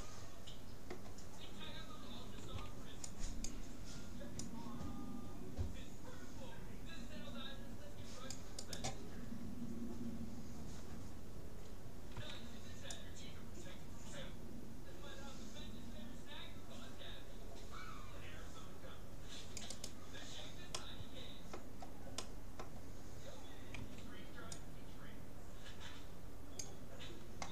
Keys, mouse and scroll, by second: 2.4 c, 10.1-12.0 middle drag, 12.2 c, 20.8-24.0 middle drag, 23.8 c.